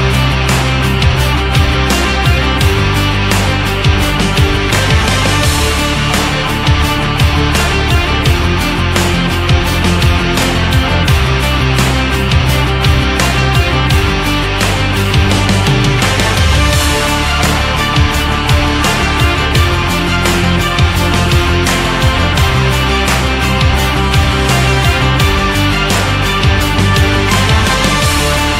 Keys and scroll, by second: 0.8 Up, 1.8 Down, 8.8 BackSpace, 11.0 shift+Left, 12.2 Right, 14.6 Left, 21.1 shift+Up, 22.5 shift+Down.